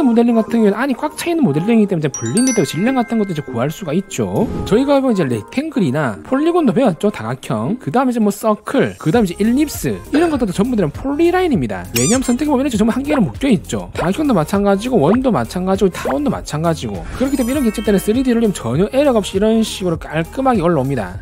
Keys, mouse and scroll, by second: 1.8 click, 5.6 click, 6.0 click, 7.4 shift+click, 8.0 c, 8.1 right click, 8.4 click, 8.9 click, 9.6 click, 13.4 click, 14.2 click, 15.3 click, 16.3 click, 17.6 click, 18.0 click, 18.5 right click, 19.3 click, 19.5 middle click, 20.3 right click.